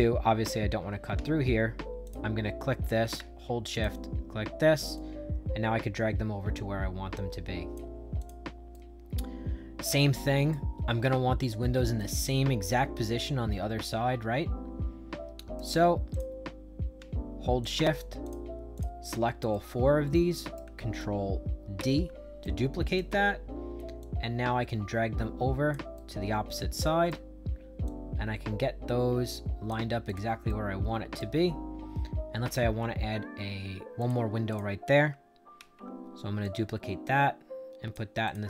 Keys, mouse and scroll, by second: 1.9 click, 3.6 shift+click, 4.9-7.6 drag, 8.1 click, 8.6-10.4 right drag, 11.9-15.5 right drag, 16.0 click, 17.5 shift+click, 18.1 shift+click, 18.7 shift+click, 19.4-20.5 right drag, 21.7 ctrl+d, 22.3 right click, 23.9-25.6 drag, 25.9-27.0 right drag, 27.8-29.6 drag, 30.0 click, 30.4 right click, 31.4-33.9 middle drag, 33.9 click, 34.4 click, 35.5 ctrl+d, 36.3-37.8 drag, 38.2 click.